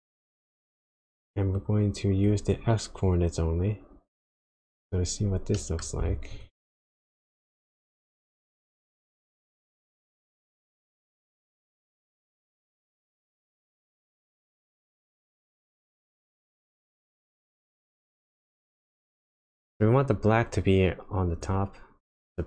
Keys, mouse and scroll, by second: 0.0 click, 1.5 click, 3.0 click, 5.5 middle click, 5.9-6.4 scroll up 2, 6.4 ctrl+shift+click, 15.4 click.